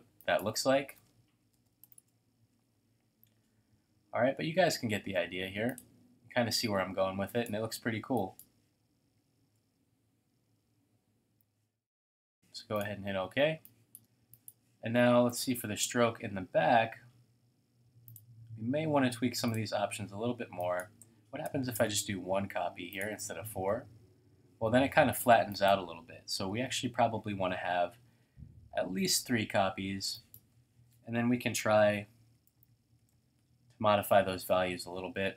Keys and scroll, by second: 1.0-2.3 typing, 7.9 typing, 9.0-9.4 typing, 13.5 typing, 17.8-18.6 typing, 21.7 Tab, 26.2-27.0 typing, 27.4 Tab, 32.0-32.7 typing, 33.1 Tab.